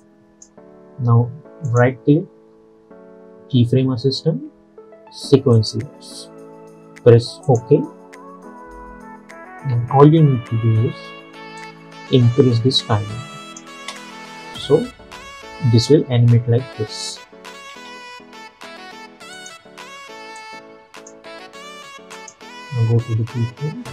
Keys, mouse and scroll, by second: 0.1-1.7 drag, 1.8 right click, 5.6 click, 9.8 -, 10.0 -, 10.2 -, 11.7-13.9 drag, 13.9 space, 15.4-15.8 scroll down 1, 15.8 space, 17.8 space, 19.4-22.2 drag, 23.0 space.